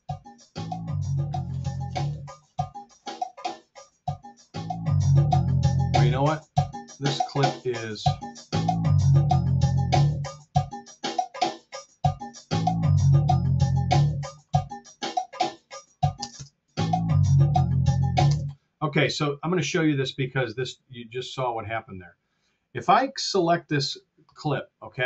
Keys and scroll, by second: 16.2 space, 18.2 space, 23.8 F8.